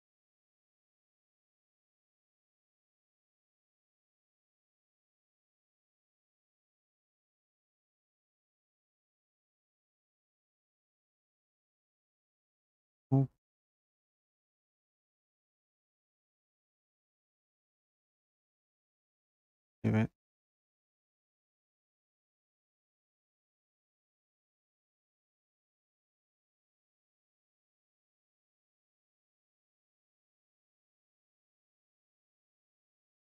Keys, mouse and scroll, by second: 1.8 click, 1.9 click, 6.2 click, 7.5 BackSpace, 8.5 BackSpace, 10.4 click, 12.7 m, 14.8 click, 15.6 click, 16.1 scroll, 17.4 scroll, 20.4 click, 24.3 click, 26.3 click, 30.9-32.6 scroll, 32.6-33.3 scroll down 10.